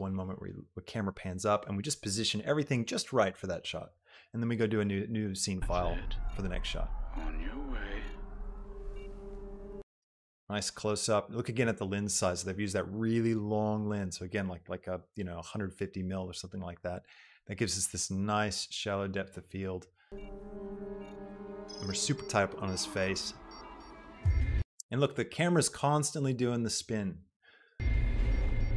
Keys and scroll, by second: 5.8 space, 9.8 space, 20.1 space, 24.8 space, 27.8 space.